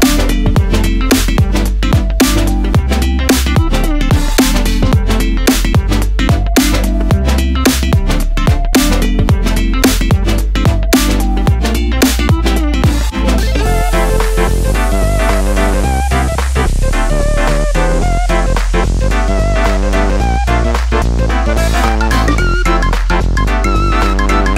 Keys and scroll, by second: 5.9 d.